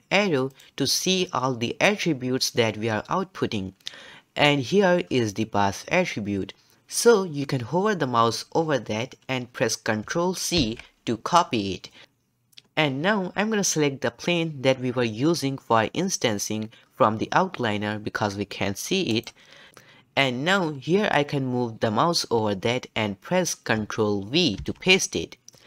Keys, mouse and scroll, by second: 0.5-3.7 drag, 10.6 ctrl+c, 19.1 click, 24.6 ctrl+v.